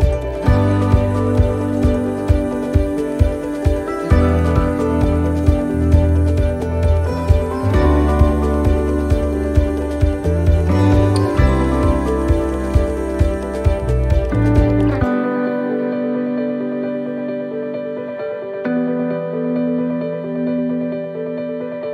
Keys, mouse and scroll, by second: 5.8 click, 6.7 middle click, 8.7 click, 10.1 middle click, 10.9 shift+middle click, 12.0 click, 13.5 middle click, 15.0 click, 16.4 middle click, 17.8 click, 19.2 scroll up 1, 19.3 middle click, 21.1 click.